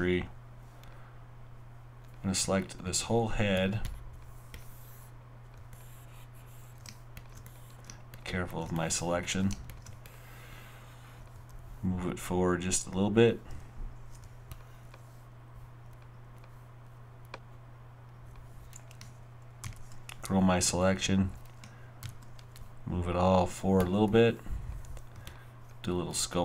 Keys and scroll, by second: 19.6 shift+., 22.0 shift+>.